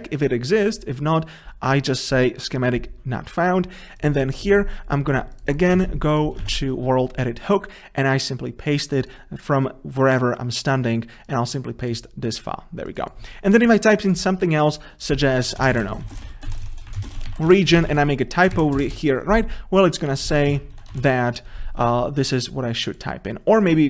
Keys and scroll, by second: 2.5 Delete, 7.1 ctrl+v, 16.7 ctrl+BackSpace.